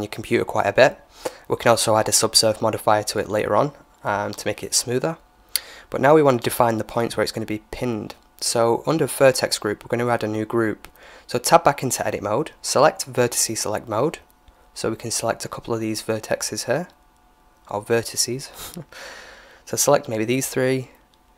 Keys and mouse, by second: 5.8-7.7 drag, 10.2 Tab, 12.0-14.3 drag, 13.2 right click, 14.3 KP_1, 15.5-16.6 middle drag, 16.6 right click, 19.9 right click.